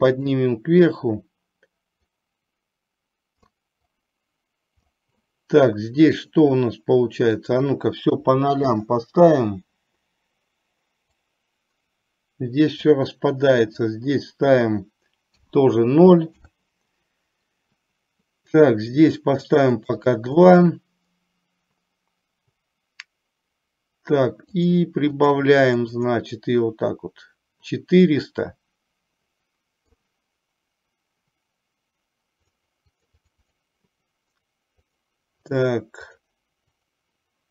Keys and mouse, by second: 2.3-3.7 drag, 4.2 click, 7.5-8.9 drag, 11.3-12.9 drag, 13.8-16.5 drag, 19.5 click, 19.9 click, 25.3 click, 25.7 click, 28.2-30.0 middle drag, 32.9 click, 33.5 click, 35.0 click, 35.5 click, 36.9 click.